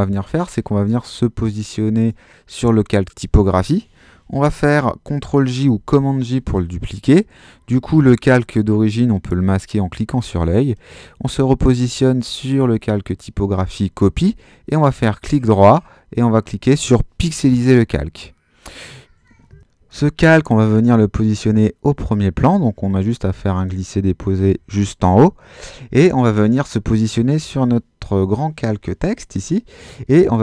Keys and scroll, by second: 5.6 super+j.